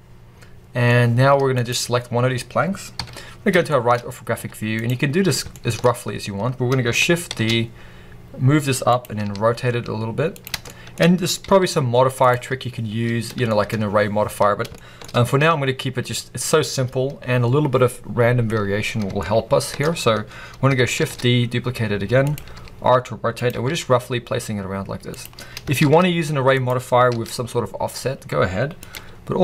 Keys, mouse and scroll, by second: 1.4 click, 1.8-2.9 scroll down 1, 2.9 KP_3, 3.6 shift+middle drag, 3.8 scroll up 1, 4.2 z, 5.4 shift+middle click, 5.7-6.4 scroll up 1, 6.4 scroll down 1, 7.1 shift+d, 8.1 middle click, 8.9 click, 9.1 r, 10.3 click, 10.5-12.1 shift+middle drag, 10.9-11.3 scroll up 2, 11.3 g, 12.1 click, 13.0 scroll down 1, 13.3 shift+middle click, 13.6 scroll up 1, 14.6-14.9 shift+middle drag, 14.9-15.5 scroll up 1, 19.0 shift+scroll up 1, 19.1 shift+middle click, 20.9 shift+d, 22.0 middle click, 22.2 click, 22.4 r, 23.4 g, 25.1 click, 25.4 scroll down 1, 25.7 shift+d, 26.5 click, 27.0 r, 28.8 click, 28.9 g.